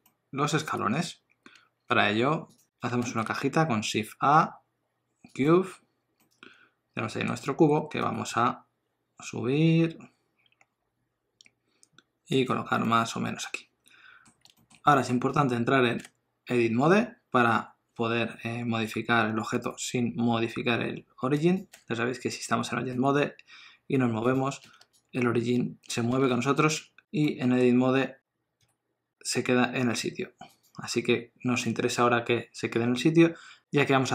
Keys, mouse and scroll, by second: 2.7 n, 3.0 shift+a, 6.2 middle click, 8.1 g, 12.8 middle click, 14.6 shift+middle click, 14.9 middle click, 16.0 Tab, 19.6 g, 21.7 Tab, 22.9 g, 26.8 Tab, 27.3 middle click, 28.6 g, 31.6 middle click.